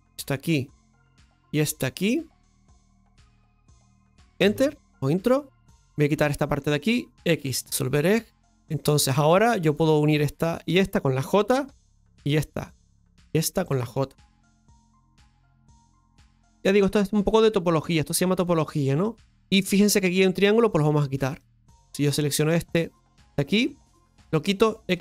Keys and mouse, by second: 5.7 right click, 6.4 shift+right click, 8.9 click, 9.8 right click, 10.7 shift+right click, 11.6 j, 12.9 right click, 13.5 shift+right click, 14.3 j, 15.0-16.5 right drag, 17.1 right click, 17.2 g, 21.4 click, 22.2 right click, 22.8 right click, 23.5 shift+right click.